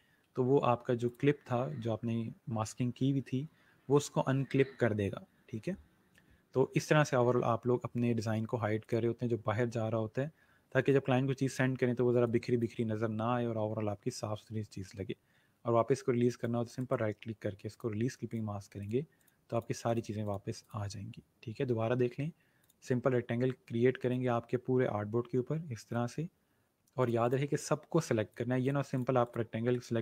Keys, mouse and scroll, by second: 0.4 scroll down 1, 1.0 click, 8.3 ctrl+z, 8.8 click, 10.8 space, 10.9 click, 11.3 space, 12.3 click, 16.2 click, 16.7 right click, 17.6 click, 22.5 click, 29.5 click, 29.7 right click.